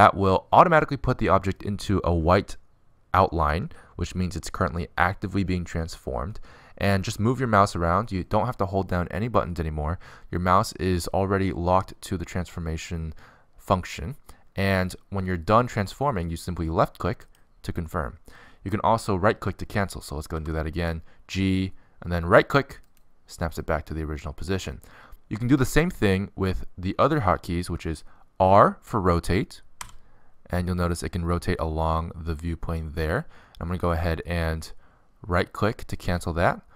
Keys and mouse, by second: 21.0 g, 30.1 r.